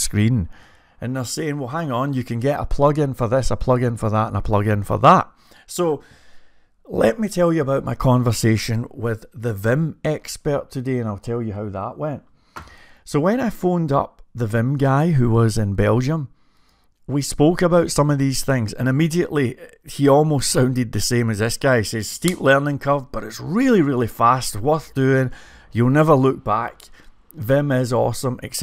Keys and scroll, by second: 15.2-18.4 typing.